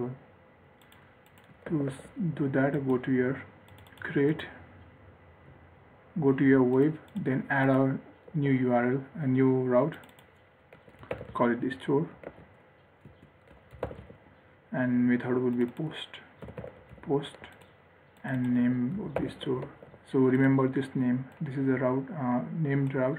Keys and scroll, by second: 2.0 ctrl+s, 8.7 ctrl+d, 12.6 ctrl+z, 20.0 ctrl+s.